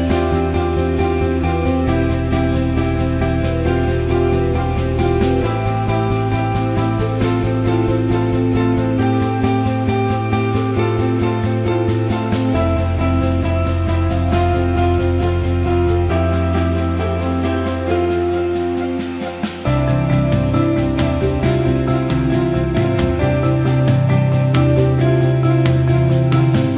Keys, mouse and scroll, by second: 0.9-2.1 alt+shift+middle drag, 3.1 g, 6.1 Tab, 7.8 alt+middle click, 9.5 click, 10.9 click, 11.9 click, 12.7 alt+shift+middle click, 12.9 alt+middle click, 13.8 Tab, 14.6 click, 15.7 click, 16.5 click, 19.0 shift+click, 23.4 e, 24.3-25.9 drag, 26.2 alt+middle click, 26.5 alt+shift+middle click.